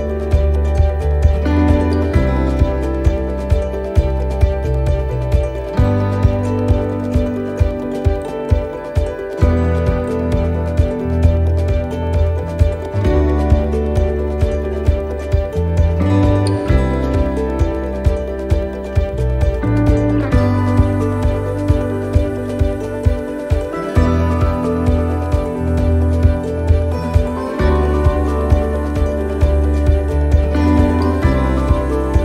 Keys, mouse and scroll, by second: 4.3 middle click, 5.1 shift+middle click, 5.8 middle click, 8.2 click, 11.3 middle click, 12.9 middle click, 15.2 right click, 16.3 middle click, 17.6 middle click, 18.1 shift+right click, 18.7 shift+right click, 18.9 middle click, 20.4 click, 22.3 ctrl+z, 22.7 middle click, 25.2 middle click, 27.2 middle click, 27.2 click, 28.9 middle click.